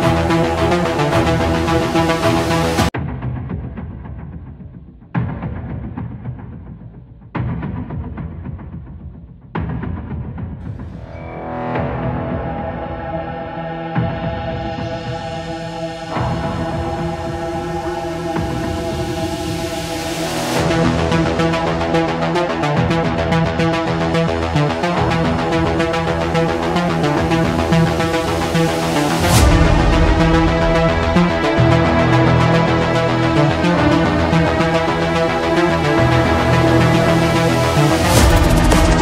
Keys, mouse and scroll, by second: 0.6 Escape, 1.3 Escape, 3.3 middle click, 3.4 middle click, 5.7 click, 6.6 click, 7.8 click, 10.4 click, 11.4 click, 15.4-16.5 middle drag, 16.6-18.6 drag, 23.9 middle click, 24.4 middle click, 25.7 click, 27.4 click, 28.6-29.7 drag, 30.7-31.7 drag, 32.6 click, 34.3-35.8 scroll, 37.2-37.5 scroll, 37.7-39.0 scroll.